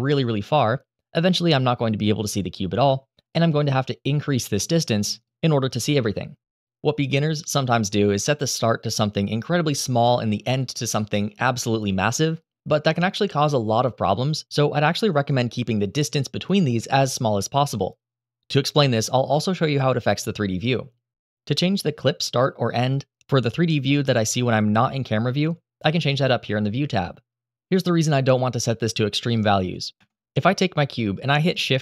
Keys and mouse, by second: 2.9 click, 4.1 click, 4.9-6.5 drag, 7.2 g, 7.4 middle click, 21.8-22.7 middle drag, 30.0 shift+a, 30.2 click.